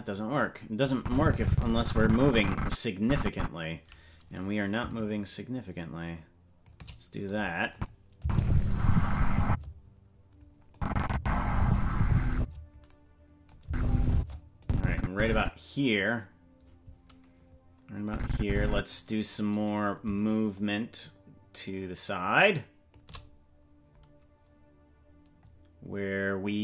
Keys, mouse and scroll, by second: 1.0-3.6 drag, 5.1-6.7 shift+drag, 7.7 click, 8.2 space, 9.4 space, 10.7 click, 11.1 space, 12.3 space, 13.6 space, 14.1 space, 14.6-15.8 drag, 18.0 click, 20.5-22.9 shift+drag, 25.8-26.2 scroll down 2.